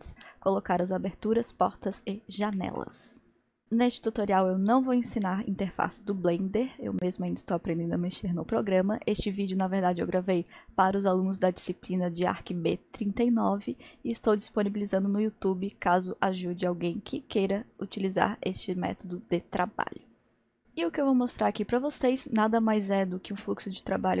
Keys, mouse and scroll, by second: 3.6-7.4 middle drag, 11.4-12.4 scroll up 1, 12.4-13.3 scroll up 1, 13.3-13.8 scroll up 1, 13.8-16.8 middle drag, 20.6-24.2 middle drag.